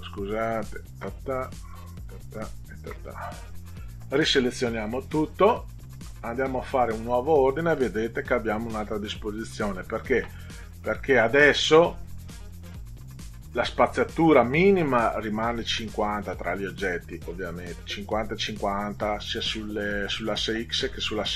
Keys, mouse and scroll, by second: 0.5 ctrl+click, 1.5 click, 2.4 ctrl+click, 6.8 click.